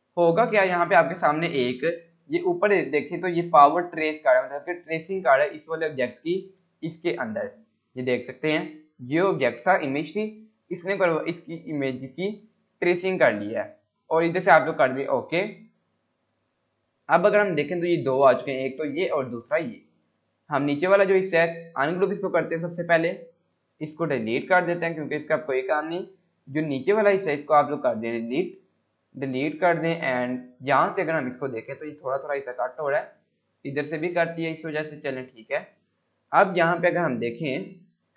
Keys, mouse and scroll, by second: 13.4 F9, 15.0 click, 15.6 scroll down 1, 16.3-16.7 click, 17.1 scroll up 1, 18.4 click, 19.4 scroll down 1, 19.8 scroll up 1, 20.6 click, 23.1 scroll down 1, 23.7 click, 24.7 Delete, 25.3 click, 25.8 scroll up 1, 26.8-28.0 click, 28.1 Delete, 28.5-29.1 scroll down 1, 29.2 scroll up 1, 29.8 scroll down 1, 30.8 scroll up 1, 32.5 alt+Tab, 34.1 alt+Tab, 34.7 scroll down 1, 35.4-37.2 scroll up 1.